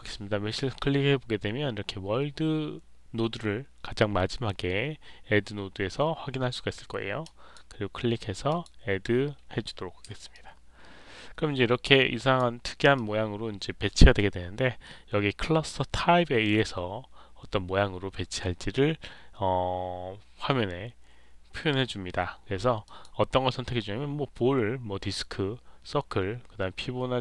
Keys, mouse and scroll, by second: 7.1 click, 8.4 click, 10.2-12.3 alt+drag, 12.9-13.9 alt+drag, 22.8 click.